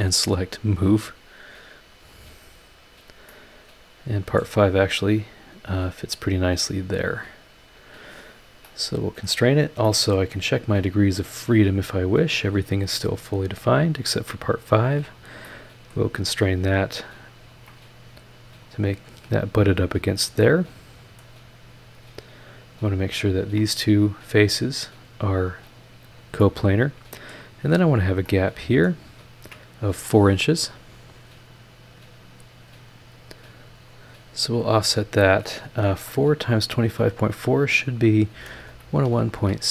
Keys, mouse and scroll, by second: 0.1 click, 1.0 click, 2.6 scroll down 2, 3.2 scroll down 2, 3.3-4.5 middle drag, 3.4-4.5 drag, 4.6-4.9 scroll up 2, 5.5-6.6 drag, 7.5 click, 8.4 scroll up 1, 8.6 click, 9.5 scroll down 2, 9.8 middle click, 9.9 click, 11.6 click, 12.2 click, 12.7-13.3 scroll up 2, 13.8 click, 14.4 scroll up 1, 15.1 click, 15.4 right click, 16.2-16.7 scroll down 1, 17.0 scroll up 1, 17.5 ctrl+click, 18.6 click, 20.1 click, 20.4 middle click, 21.4-21.9 scroll down 2, 21.9-22.5 scroll up 2, 22.8 ctrl+click, 23.3 ctrl+click, 24.3 click, 25.6 click, 26.4-27.5 middle drag, 27.7 click, 28.2-29.0 middle drag, 29.3 ctrl+click, 33.1 click, 34.7 click, 38.3-39.4 typing.